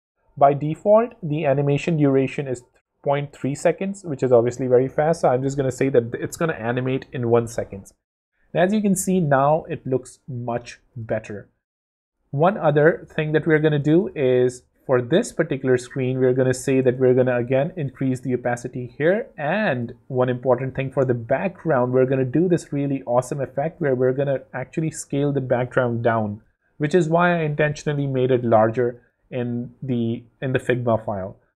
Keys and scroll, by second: 5.2 w, 6.4 w, 7.9 w, 13.2 super+d, 14.0 super+space, 16.8 0.